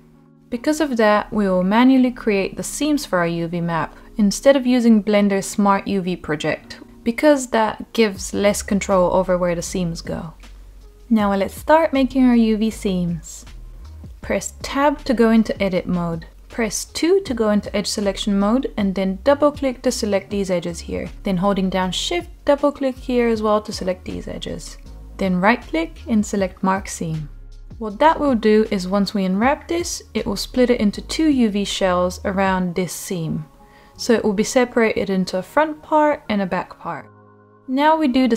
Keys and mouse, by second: 0.0 Tab, 0.0 a, 1.3 shift+click, 2.0 shift+click, 2.3 shift+middle click, 3.4 shift+click, 4.7-6.7 shift+middle drag, 6.7 a, 7.5 u, 9.2-11.0 drag, 11.5 Tab, 12.7 Tab, 14.6 Tab, 15.9 middle click, 17.6 2, 18.8 click, 19.2-20.3 middle drag, 21.8 shift+click, 22.5-23.8 middle drag, 25.0-26.2 right drag, 26.9-29.6 middle drag, 31.4-32.2 middle drag, 34.0-35.2 middle drag, 36.1-36.5 middle drag, 37.0 Tab.